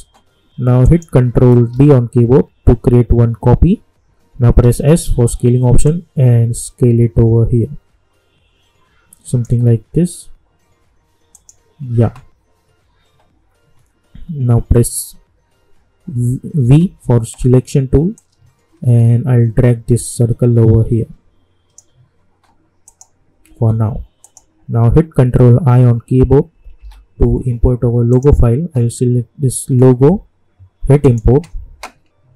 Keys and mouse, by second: 1.7 ctrl+d, 4.6 s, 5.8-11.3 drag, 16.6 v, 18.1-22.8 drag, 23.5 u, 24.2 click, 26.7 ctrl+i, 28.1 click, 31.0-32.3 drag.